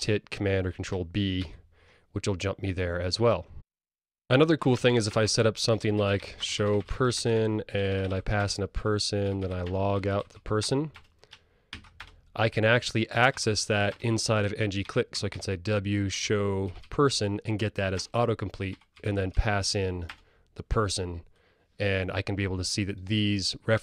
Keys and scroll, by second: 1.5 super+b, 7.6 Tab, 12.2 super+e, 15.0 Return.